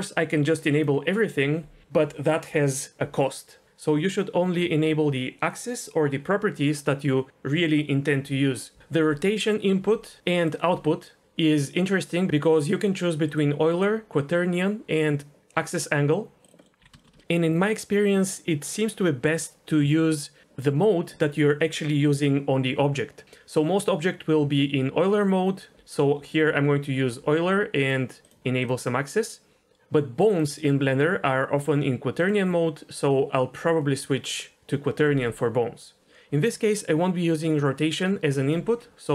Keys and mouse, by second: 0.3 click, 10.4 click, 13.4-16.1 drag, 16.6 middle click, 16.8 n, 17.0 shift+middle click, 17.2 shift+middle click, 27.8 click, 28.2 click, 28.6 click, 30.4-32.3 drag, 38.0 click.